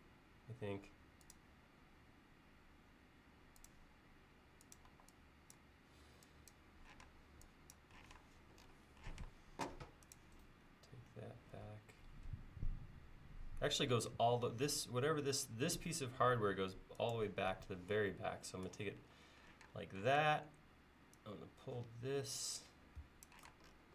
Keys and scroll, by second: 1.6 l, 4.9 e, 7.1 space, 8.1 m, 9.2 m, 19.7 space, 20.1 p, 23.1 Escape, 23.5 space.